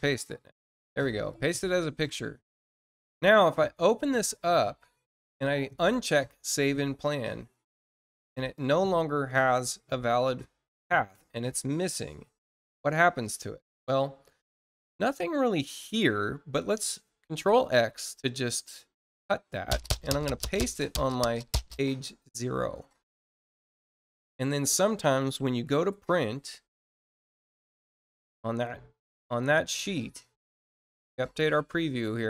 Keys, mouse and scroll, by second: 1.2 click, 3.3 click, 5.7 click, 8.2 click, 10.8 click, 12.0 click, 13.7 click, 14.8-15.2 scroll down 1, 18.5 ctrl+click, 22.0 click, 23.3 click, 24.5 scroll up 1, 29.1 click, 31.1 click.